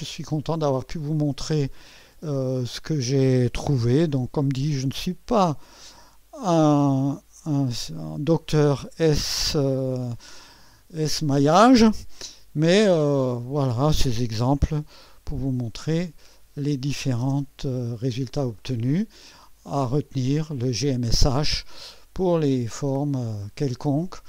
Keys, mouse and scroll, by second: 0.9 click, 2.7-3.4 drag, 3.8 0, 8.0 click, 12.2 0, 13.4-14.7 right drag, 15.8 click, 17.2 0, 18.6-19.5 right drag, 22.4 click.